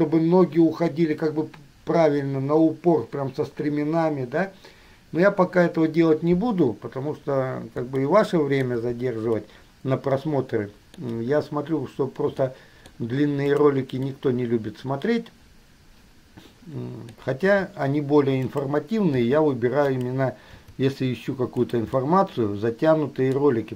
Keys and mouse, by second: 8.2-9.0 shift+middle drag, 9.6-11.2 middle drag, 12.7-13.8 middle drag, 14.2-17.7 middle drag, 17.7 g, 19.2 r, 21.8 g, 22.2-23.7 middle drag.